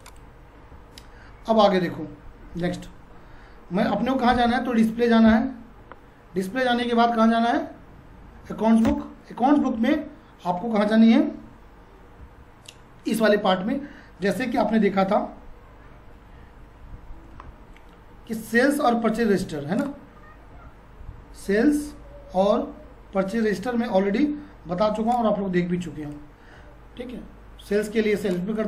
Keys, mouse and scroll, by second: 0.0 click, 2.6 F4, 3.8 Up, 5.3 d, 6.8 Down, 8.8 Return, 9.6 Down, 17.3 F6, 22.8 Tab, 25.1 click, 25.4 Tab, 28.3-28.6 drag.